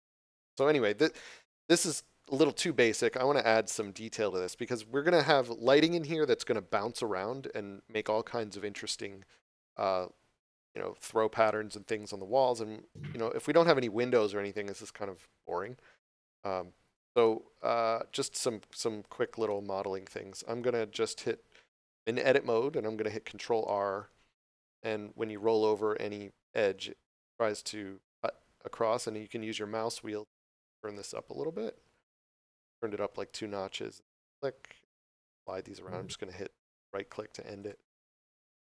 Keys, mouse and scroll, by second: 2.9 scroll down 1, 3.7 scroll up 1, 3.7 middle click, 10.6 middle click, 18.0 scroll up 1, 18.8 Tab, 19.4 middle click, 20.6 scroll up 1, 23.8 ctrl+r, 29.6 scroll up 1, 34.1 click, 38.1 middle click.